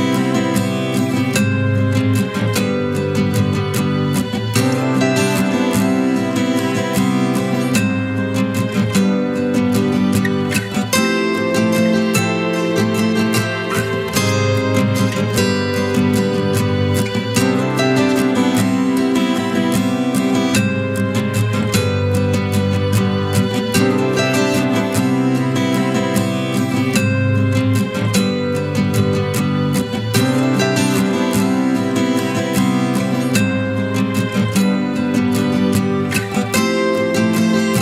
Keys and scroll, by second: 3.0 ctrl+KP_Subtract.